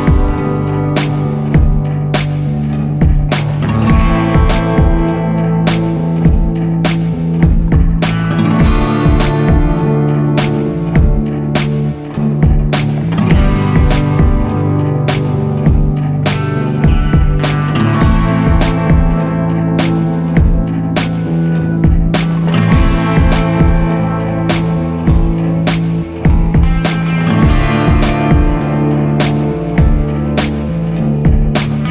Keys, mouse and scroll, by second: 0.1 ctrl+a, 6.1 ctrl+-, 7.2 ctrl+0, 11.0 ctrl+g, 16.3 ctrl+t.